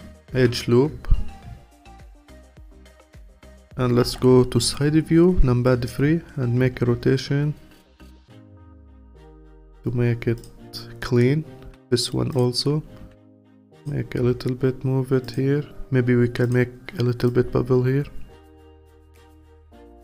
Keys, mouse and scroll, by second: 0.4 q, 2.6-4.0 alt+drag, 4.0 KP_3, 6.6 r, 10.4 click, 11.7 q, 13.0 r, 14.2 g, 16.4 click, 19.5 click, 19.7 q.